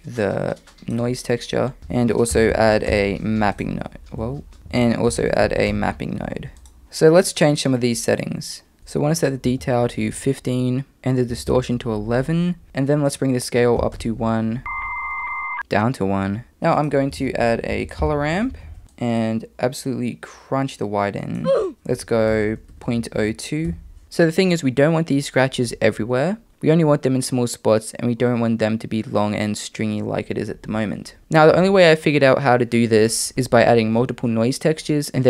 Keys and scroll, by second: 1.8 shift+a, 2.6 p, 4.2 super+z, 4.6 super+z, 4.6 x, 4.8 shift+a, 5.4 p, 11.5 1, 12.6 super+z, 17.3 shift+a, 22.8 BackSpace, 22.9 BackSpace, 23.2 BackSpace.